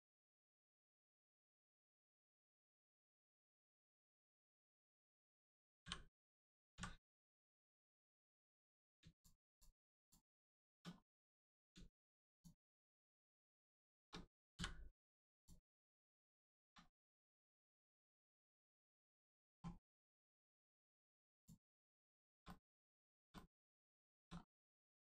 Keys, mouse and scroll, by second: 2.3 click, 3.0 middle click, 5.8 l, 7.7 click, 9.1 shift+click, 9.5 shift+click, 10.0 shift+click, 10.5 shift+click, 13.6 shift+click, 14.5 m, 15.3 click, 15.8 middle click, 16.4 shift+middle click, 16.9 middle click, 17.0 middle click, 19.8 shift+middle click, 20.4 middle click, 20.4 middle click, 21.3 click, 21.7 middle click, 22.0 shift+middle click, 22.4 middle click, 22.5 middle click, 23.0 shift+middle click, 23.3 middle click, 23.4 middle click, 24.0 shift+middle click, 24.3 scroll up 1, 24.8 middle click.